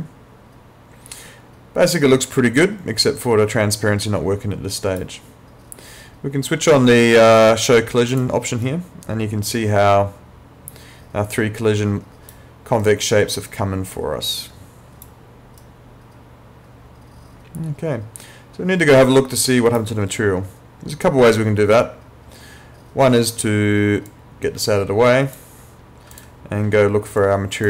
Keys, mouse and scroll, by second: 8.1 click, 8.6 right click, 12.8 right click, 15.6 right click, 24.1 click.